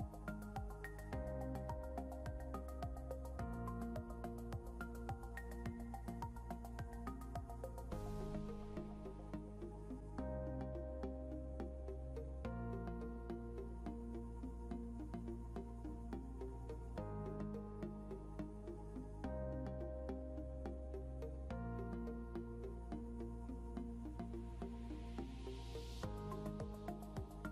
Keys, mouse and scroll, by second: 6.2 scroll up 1, 6.7-7.7 scroll up 1, 10.2 scroll down 1, 11.4 scroll up 1, 15.5-16.7 scroll down 1, 16.7-17.6 scroll down 1, 18.5 scroll up 1, 19.2-20.1 scroll up 1, 21.0 scroll down 1, 22.5 scroll up 1, 25.7 scroll down 1.